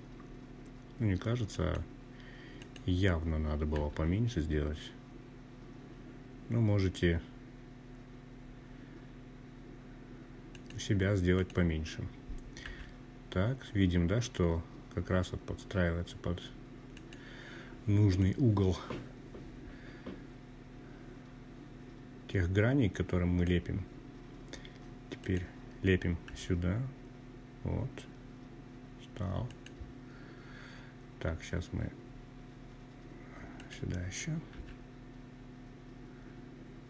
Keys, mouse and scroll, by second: 0.6 click, 1.7 g, 8.5 click, 9.3 click, 10.6 g, 14.9 click, 16.2-21.5 drag, 23.2 click, 24.2 g, 27.4 click, 31.5 click, 32.5 g, 36.4 click.